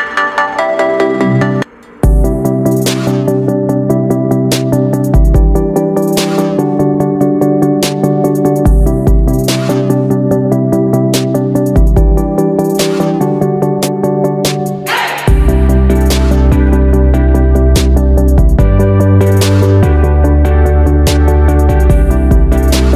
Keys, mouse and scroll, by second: 5.2 ctrl+g, 6.6 click, 8.6 Down, 9.0 Down, 9.1 typing, 13.2-17.3 drag, 18.0 ctrl+g, 19.2 click, 21.4 Down, 21.8 Down, 21.8 typing.